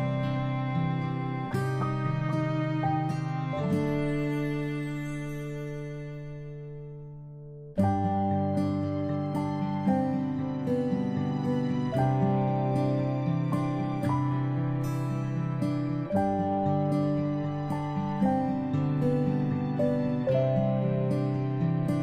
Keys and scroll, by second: 8.5-9.0 ctrl+space, 9.8 space, 9.8 p.